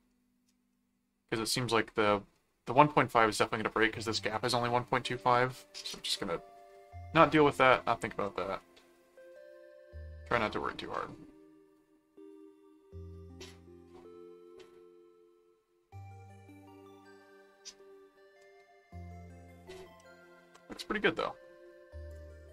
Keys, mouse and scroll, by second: 0.7 middle click, 1.6 middle click, 7.5 middle click, 8.6 middle click, 9.3-10.4 middle drag, 11.0-14.6 middle drag, 15.1 middle click, 15.9-17.0 middle drag, 17.4 middle click, 18.8 middle click, 19.9 middle click, 22.1 click.